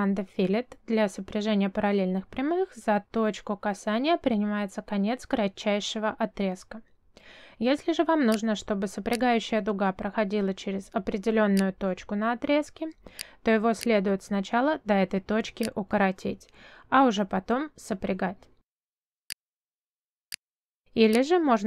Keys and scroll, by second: 3.9 ctrl+z, 6.9 ctrl+y, 17.1 Escape, 18.4 space.